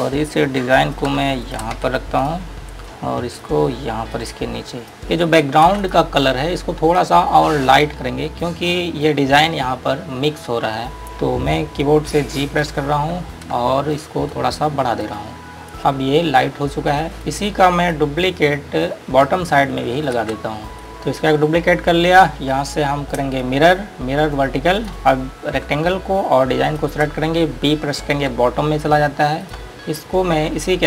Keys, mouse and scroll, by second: 0.0 click, 1.6 click, 2.1 c, 2.5 click, 2.8 scroll up 1, 3.0 click, 6.0 g, 6.1 click, 6.8 scroll down 1, 8.5 scroll up 1, 10.9 scroll down 1, 11.0 click, 12.7 g, 14.6 click, 15.8 space, 16.0 click, 16.4-17.1 scroll up 1, 17.1-17.5 scroll down 1, 17.5 click, 24.9 click, 26.9 click, 29.1 scroll down 1, 29.7 click, 30.4-30.8 scroll up 1.